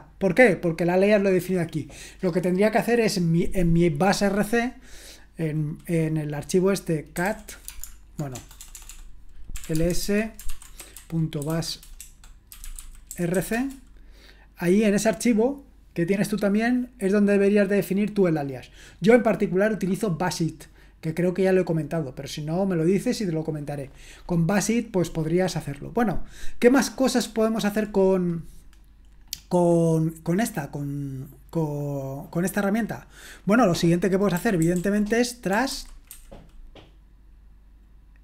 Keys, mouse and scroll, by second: 7.0-13.8 typing, 30.4-30.9 scroll up 1, 30.9-31.7 scroll down 1, 34.1-36.6 typing.